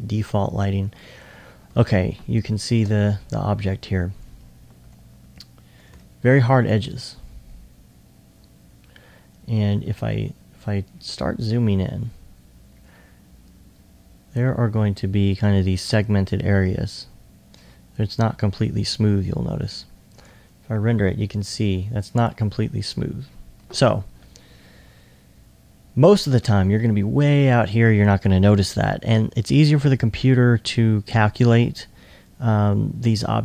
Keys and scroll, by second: 9.2 2, 10.7-11.4 typing, 12.7-13.9 typing, 15.0 2, 26.3 2, 26.9 2.